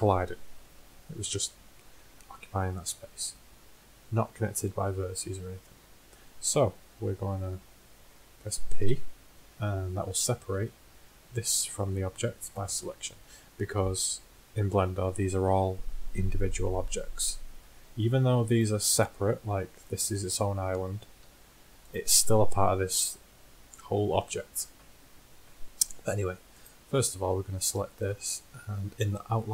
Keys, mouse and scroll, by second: 6.3-11.6 middle drag, 8.9 p, 16.9-18.7 middle drag, 18.7-20.2 right drag, 20.2 l, 21.5 g, 26.4 Tab, 29.3-29.5 drag.